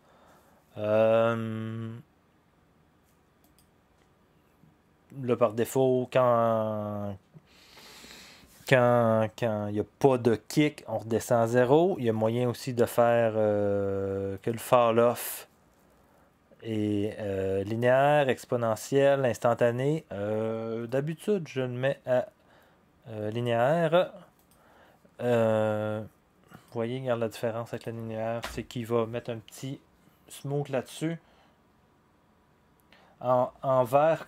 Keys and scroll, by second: 28.4 0.